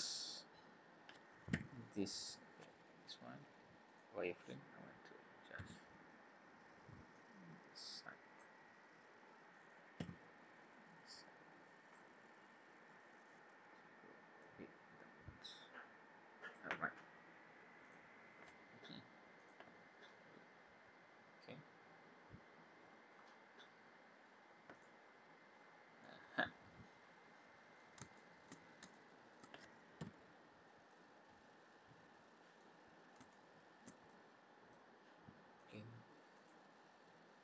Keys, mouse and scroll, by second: 0.1 click, 1.5 b, 4.0 click, 5.5 b, 9.9 b, 12.7 scroll down 3, 13.4-13.7 scroll up 2, 14.4 click, 16.5 click, 17.8 click, 18.3 scroll down 2, 19.4 click, 19.8 scroll down 2, 20.3-21.8 scroll up 9, 21.8 scroll down 2, 22.4 scroll up 1, 22.7-23.1 scroll down 5, 24.7 click, 25.2-25.8 scroll down 3, 26.0 middle click, 28.1 shift+middle click, 29.0 middle click, 30.0 n, 30.4 scroll down 3, 30.9 middle click, 32.8 scroll up 2, 33.3 shift+middle click, 34.1 middle click, 35.6 click, 36.3 click.